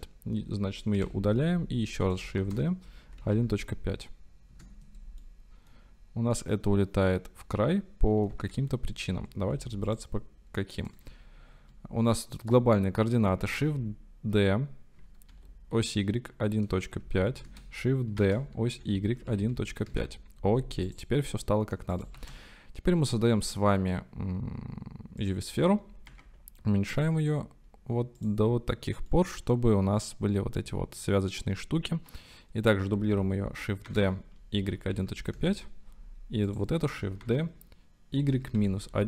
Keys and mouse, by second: 0.9 Delete, 2.1 click, 2.4 shift+d, 3.0 KP_1, 3.2 KP_Decimal, 3.5 KP_5, 4.6 KP_Enter, 5.3-5.8 drag, 6.4-8.3 drag, 8.5 ctrl+z, 9.6 x, 12.5-13.3 drag, 13.5 shift+d, 15.3 y, 16.3 KP_1, 17.0 KP_Decimal, 17.0 KP_5, 17.4 KP_Enter, 18.2-19.7 typing, 19.9 KP_Enter, 22.2 shift+a, 26.1 s, 28.2 click, 29.1-31.4 middle drag, 33.8-35.1 typing, 35.4 KP_Enter, 37.2-39.0 typing, 38.9 KP_Subtract.